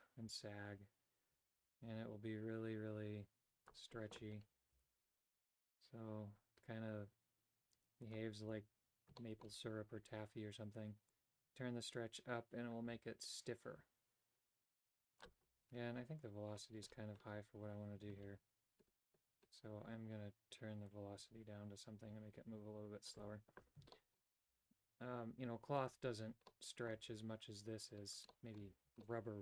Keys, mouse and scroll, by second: 4.9 g, 9.3 shift+middle click, 11.2-15.3 drag, 20.9-23.3 drag, 24.0 shift+middle click, 24.6 g, 26.6 middle click, 28.4 shift+middle click, 29.1-29.4 middle drag.